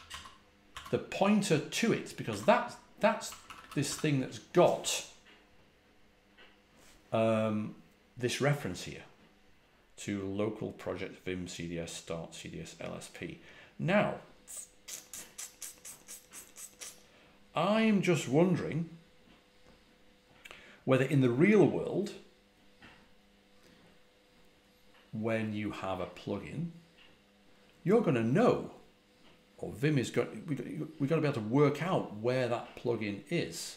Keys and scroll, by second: 0.0-0.7 typing, 2.2-4.1 typing.